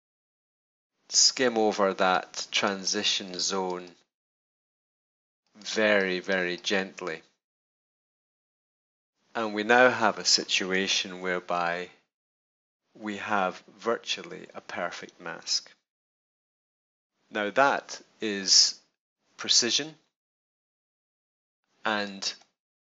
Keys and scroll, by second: 10.9 super+=, 15.6 super+-.